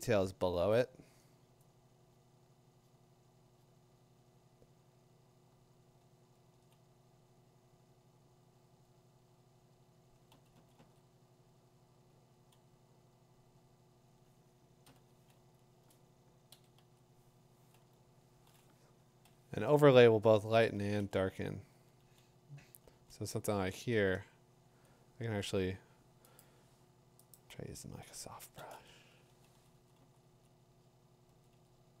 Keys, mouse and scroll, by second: 0.2 [, 6.0-6.7 [, 10.3 ], 10.5 ], 13.8 ], 14.8 b, 16.5 typing, 19.2-20.6 typing, 21.7 typing, 22.9 [, 26.4 right click, 27.3 click, 29.3-32.0 typing, 30.0-31.3 drag.